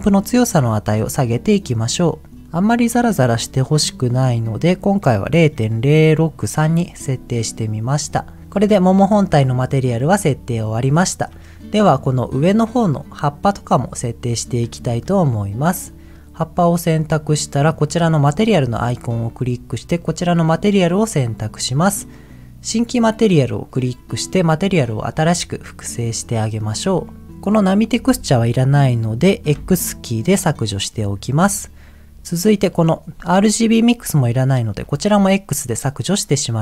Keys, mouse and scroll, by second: 0.7-4.3 drag, 8.6-10.3 middle drag, 10.9 shift+middle click, 11.9 click, 12.4 click, 13.0 click, 13.6 click, 14.8 shift+middle click, 18.4-20.8 drag, 23.9 click, 26.0-26.6 scroll down 2, 26.6-27.2 scroll down 2, 27.0 middle click, 27.2 click, 29.5 x, 32.7 click, 34.8 x, 35.7 click.